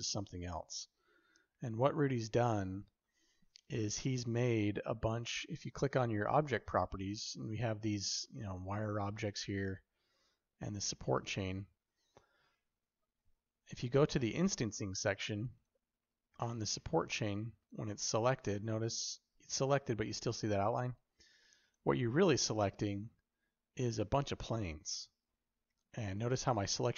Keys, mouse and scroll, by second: 15.4 click, 17.4 click, 21.5 click.